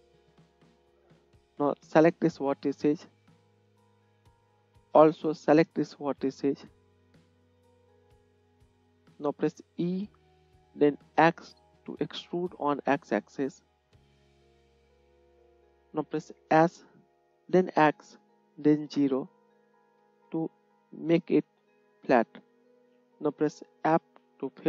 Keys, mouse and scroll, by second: 7.0 shift+middle click, 7.0 shift+right click, 9.9 e, 16.8 s, 24.4 f.